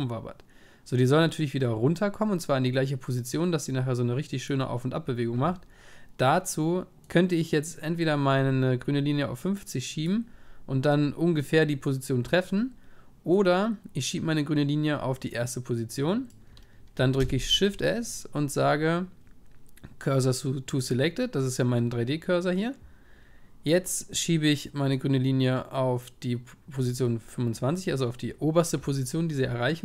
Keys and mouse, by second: 17.2 shift+s, 24.9-26.7 drag, 29.3 middle click.